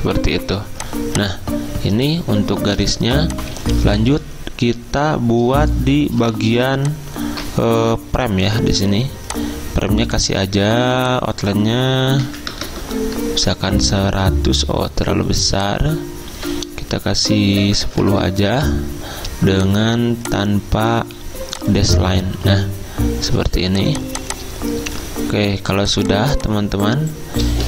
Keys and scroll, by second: 3.2 i, 12.0-13.4 typing, 17.5-18.4 typing.